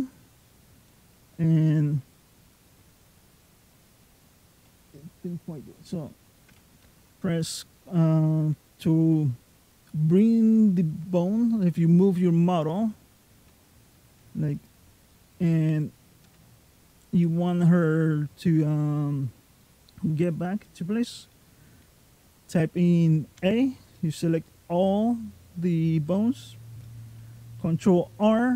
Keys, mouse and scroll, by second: 0.7 middle click, 1.9-2.5 scroll down 2, 2.5 middle click, 10.7-11.5 scroll down 4, 11.4 middle click, 12.5 click, 13.2 g, 14.9 middle click, 15.6 click, 16.1 g, 17.0 middle click, 18.2 middle click, 19.4 middle click, 23.2 a, 23.8 middle click, 25.0-25.6 scroll down 1, 25.6-26.2 scroll up 1, 28.0 alt+r.